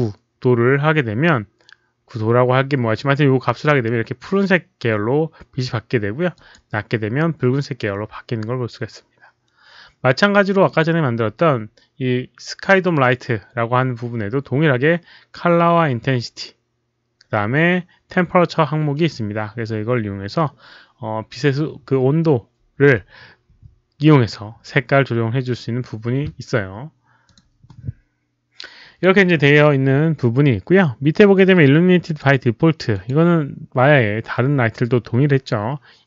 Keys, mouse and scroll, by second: 6.3 click, 10.7 click, 27.2 click, 32.0 click, 32.9 click.